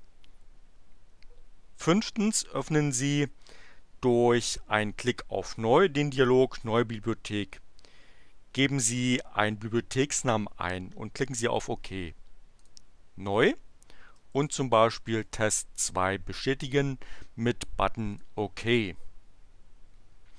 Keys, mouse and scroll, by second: 12.5 click, 14.1-15.8 typing, 18.2 click.